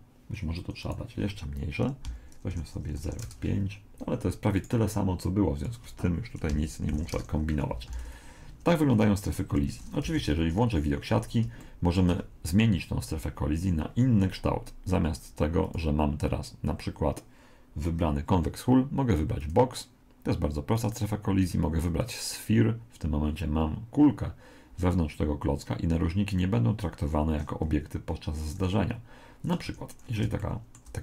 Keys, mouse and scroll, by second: 0.8 click, 4.6 right click, 5.6 click, 7.9 alt+a, 9.6 Escape, 10.0 z, 10.8-13.2 middle drag, 15.6 click, 20.8 click, 29.6 Escape, 30.0-31.0 middle drag.